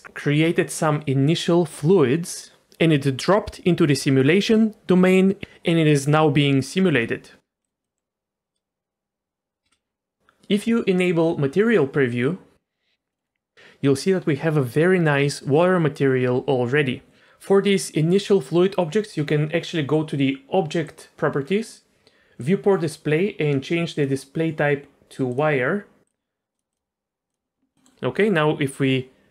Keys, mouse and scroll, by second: 7.6 click, 7.8 middle drag, 9.6 space, 13.1 middle click, 13.2 scroll up 1, 20.8 click, 21.3-22.4 scroll down 2, 22.4 click, 22.7-23.9 scroll down 2, 23.9-25.4 drag, 26.0 click, 26.5-27.3 drag, 27.7 middle click.